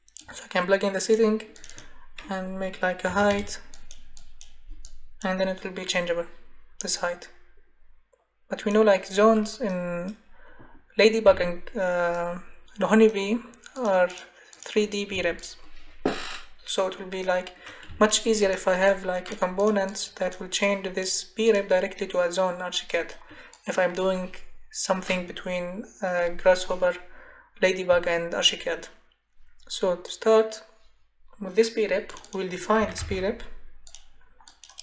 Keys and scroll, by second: 3.1 4, 3.3 Return, 15.1 Escape, 25.1 Delete, 32.5-33.6 typing.